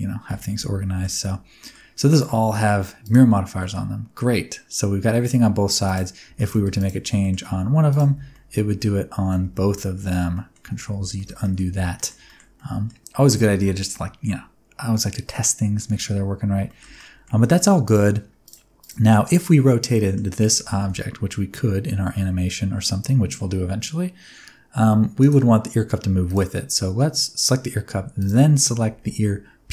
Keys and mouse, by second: 0.8 middle click, 1.5 middle click, 2.2 middle click, 3.0 click, 3.6 middle click, 6.2 Tab, 6.3 middle click, 7.1 middle click, 7.4 g, 7.8 click, 8.0 Tab, 8.3-9.2 middle drag, 9.5 ctrl+z, 10.0 ctrl+z, 10.1 middle click, 10.6 Tab, 11.1 shift+middle click, 11.4 middle click, 11.7 alt+a, 11.9 middle click, 12.2 shift+middle click, 12.5 middle click, 15.3-15.7 middle drag, 16.6 shift+middle click, 16.9 middle click, 18.4 click, 19.1 middle click, 19.9 middle click, 20.5 r, 20.7 y, 25.1 click, 28.1 shift+click.